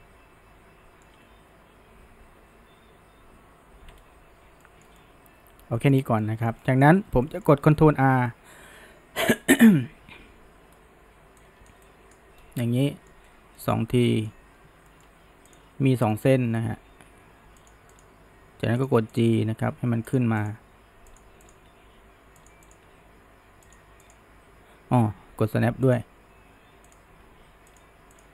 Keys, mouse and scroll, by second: 4.0-4.6 scroll up 1, 4.6-6.0 shift+middle drag, 6.0 scroll down 1, 6.2-6.9 shift+middle drag, 6.9-7.2 scroll up 1, 7.2-10.2 shift+middle drag, 10.2 ctrl+r, 12.4 scroll down 1, 12.7-13.2 middle drag, 13.2-13.6 scroll up 1, 13.6-15.5 middle drag, 15.5 click, 16.1 middle click, 16.8 g, 18.0 click, 18.4 g, 19.2 click, 19.4 g, 20.4 click, 20.7 g, 21.5 click, 21.8 g, 22.7 click, 22.9 g, 24.1 click, 25.9 drag, 26.9 drag, 27.3 g, 28.2 click.